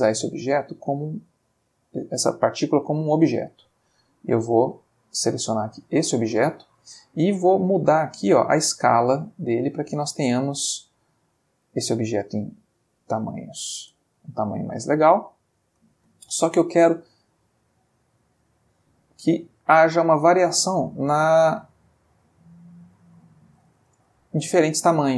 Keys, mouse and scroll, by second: 1.5 click, 4.8 click, 5.7 click, 6.5 ctrl+click, 7.1 ctrl+middle click, 8.3-11.8 drag, 13.0 click, 13.8 space, 15.6 space, 17.5-19.0 drag, 19.4-20.8 drag, 21.3-23.7 drag, 24.0 space.